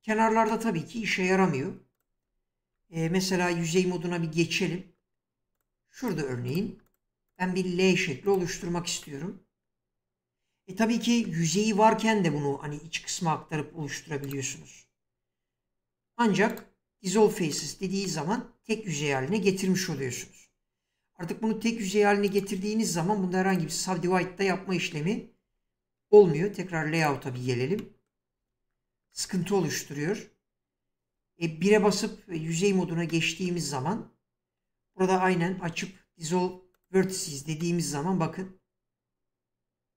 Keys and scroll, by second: 3.3 3, 12.5 e, 25.5 ctrl+z, 28.4 Tab, 31.7 1, 35.5 F3.